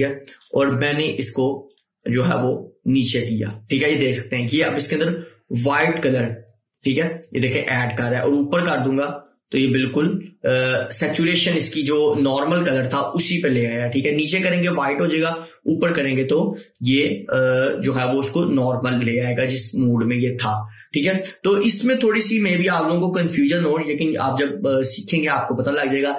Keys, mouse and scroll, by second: 21.2 scroll down 1.